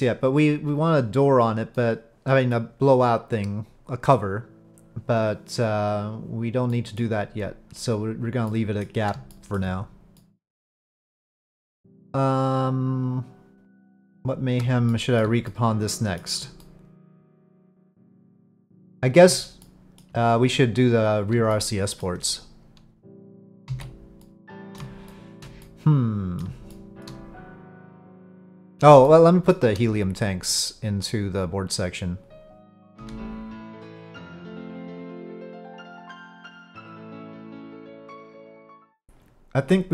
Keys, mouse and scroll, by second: 1.7-2.5 middle drag, 6.7 middle drag, 8.5-8.8 middle drag, 9.3 shift+middle drag, 10.1-14.1 middle drag, 14.9-15.2 shift+middle drag, 15.4-16.2 middle drag, 16.6-17.4 shift+middle drag, 17.7-19.3 middle drag, 19.6-20.0 shift+middle drag, 21.5-22.0 shift+middle drag, 23.7 ctrl+s, 24.2-25.4 middle drag, 25.6-26.4 middle drag, 26.7-27.0 shift+middle drag, 28.0-28.7 middle drag, 29.0-29.5 shift+middle drag, 31.9-33.0 drag, 33.0 right click, 33.0 shift+d, 33.0 s, 33.1 click, 35.4 s, 36.1-38.5 drag.